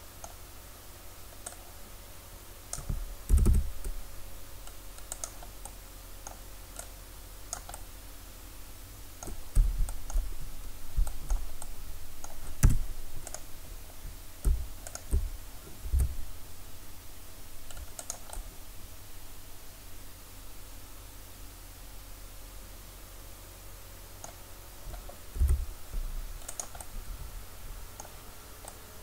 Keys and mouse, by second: 1.5 drag, 1.7-3.3 right drag, 3.3 s, 5.2-7.7 drag, 7.8 click, 8.8 middle click, 9.1-10.1 middle drag, 11.1 middle click, 11.7 middle click, 12.7 Tab, 13.3-17.2 drag, 15.9 s, 18.3-20.5 drag, 25.4 s, 26.9-28.4 drag.